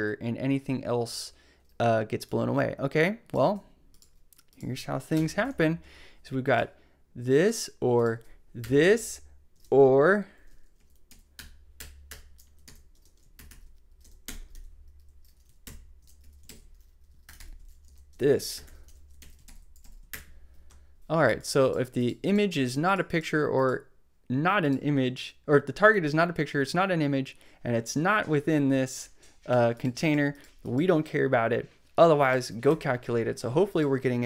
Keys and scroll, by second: 3.4 super+c, 5.1 Return, 8.6 Return, 8.9 super+Left, 9.5 super+Right, 9.8 shift+space, 10.7 shift+Left, 11.3 Return, 11.7 BackSpace, 12.4 Up, 12.6 super+Right, 12.9 super+space, 14.0 shift+\, 14.2 Return, 15.4 ctrl+super+v, 16.2 ctrl+super+Left, 17.3 shift+g, 18.1 space, 18.5 shift+\, 18.9 shift+Down, 19.2 super+Right, 20.1 shift+BackSpace, 21.0 BackSpace, 32.6 super+s.